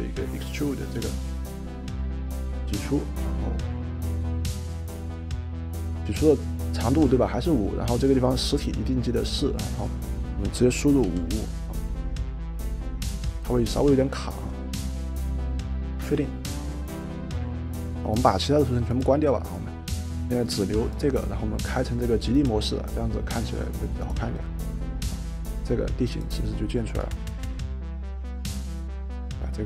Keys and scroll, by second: 11.0 5, 16.1 Return.